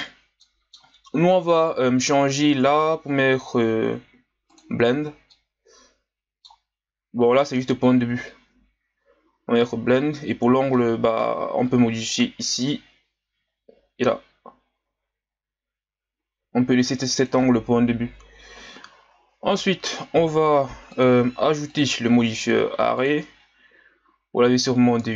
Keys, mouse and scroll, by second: 0.4-3.4 middle drag, 4.5 click, 5.3-8.3 middle drag, 10.7-12.1 middle drag, 12.1-15.1 drag, 20.9-22.9 drag.